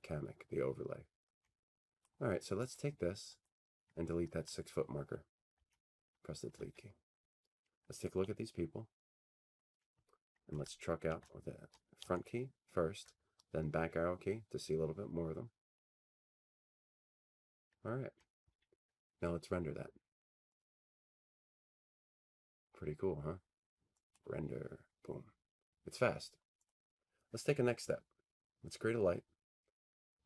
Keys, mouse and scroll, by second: 2.0 click, 2.8 right click, 3.5 click, 5.6 Delete, 9.5 middle click, 10.5-11.7 middle drag, 10.5-12.5 scroll down 7, 13.0-13.6 scroll, 13.6-20.2 scroll, 20.2 scroll, 20.8-22.9 drag, 24.3-26.3 drag, 26.9-28.9 drag.